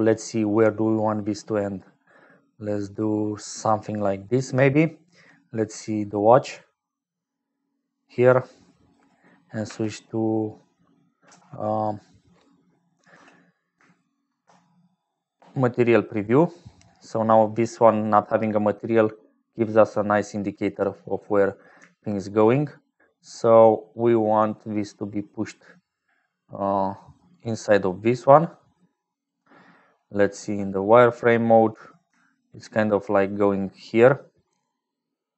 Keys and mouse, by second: 0.5-7.9 shift+drag, 8.5 click, 10.5 click, 11.3 z, 11.3 x, 13.1 z, 16.2 click, 16.2 z, 17.6 click, 22.7-29.3 shift+drag, 32.4-35.3 shift+drag.